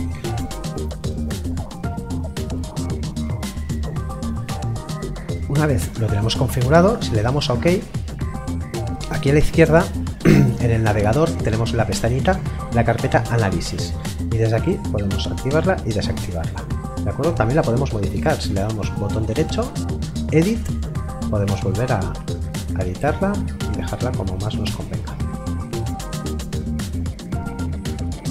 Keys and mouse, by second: 0.7 click, 7.4 click, 11.8 click, 18.8 right click, 20.2 click, 26.9 click.